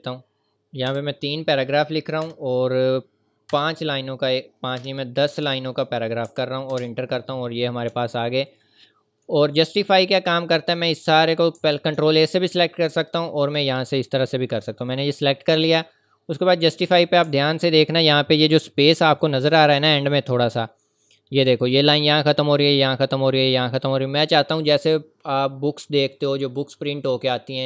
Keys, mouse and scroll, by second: 0.9 KP_3, 2.2 ,, 3.5 KP_5, 4.8 BackSpace, 5.3 KP_1, 6.3 Right, 6.7 Return, 7.5 scroll up 1, 7.9-8.4 ctrl+scroll down 1, 8.5-8.9 ctrl+scroll down 2, 9.3 scroll up 1, 10.2-10.6 scroll down 1, 10.8 click, 12.3 click, 14.5 scroll up 1, 16.4 click, 17.2 scroll up 1, 18.1 scroll up 1, 18.7 scroll down 2, 20.4-21.1 scroll down 1.